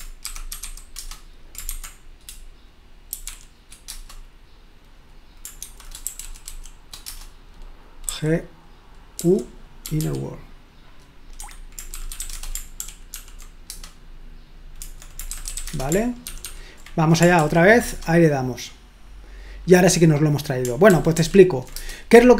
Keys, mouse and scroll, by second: 0.7-1.4 typing, 2.6-3.9 typing, 5.6-7.0 typing, 7.1 Return, 8.1 g, 9.2-10.4 typing, 11.6 Escape, 12.3-13.0 typing, 13.1 ctrl+p, 13.7 Return, 15.3-16.1 typing, 16.3 ctrl+p, 16.4 ctrl+p, 17.4 ctrl+p, 17.9 Return, 20.9 ctrl+p, 21.1 ctrl+p, 21.8 Return.